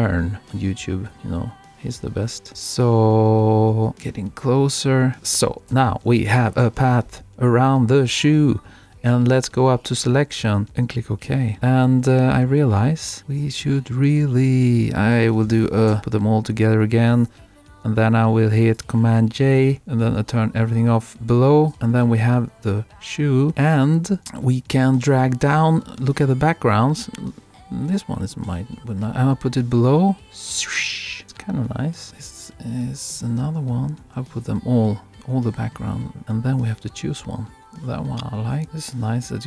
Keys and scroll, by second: 5.6 super+-.